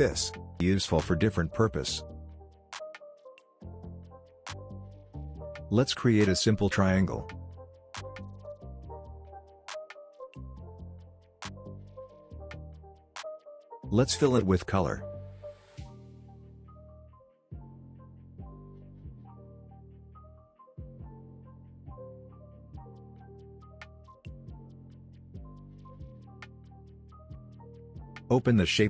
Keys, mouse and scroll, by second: 0.2 v, 0.5 click, 4.7 click, 6.0 shift+click, 9.0 v, 9.2 click, 10.2 alt+click, 24.3 alt+scroll down 1, 25.1 alt+scroll up 1, 25.5 click, 28.5-28.8 drag.